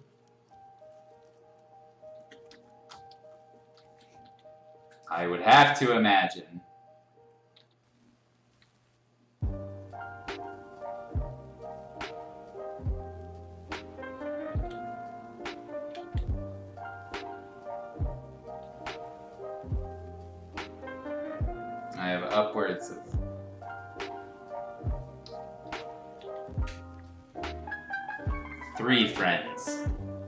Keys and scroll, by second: 2.1 ctrl+z, 2.5 space, 3.2 space, 3.8 r, 4.2 b, 7.5 x, 8.6 x, 14.5 ctrl+z, 16.0 ctrl+z, 18.6 ctrl+z, 25.2 Escape, 26.2 ctrl+z, 28.5 x, 29.8 x.